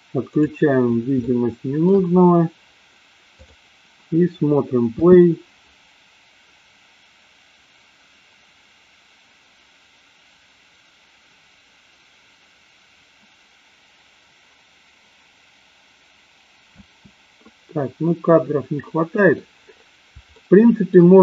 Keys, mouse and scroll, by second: 0.3 click, 1.3 shift+middle click, 3.4 click, 4.9 space, 17.2 space, 18.9-19.4 middle drag, 20.4-21.0 shift+middle drag.